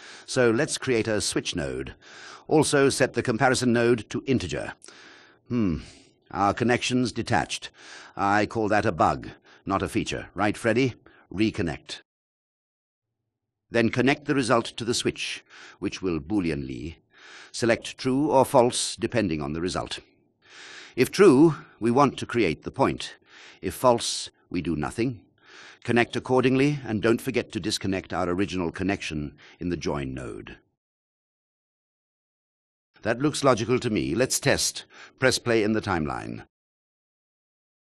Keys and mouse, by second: 2.4-4.6 drag, 5.9 click, 7.3 click, 13.7 click, 13.9-23.3 drag, 23.9 click, 37.3 click.